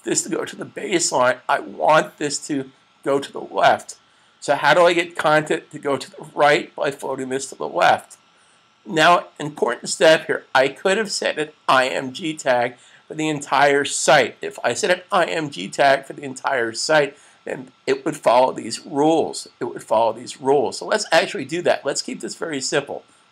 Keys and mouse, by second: 9.4 click, 21.2 click.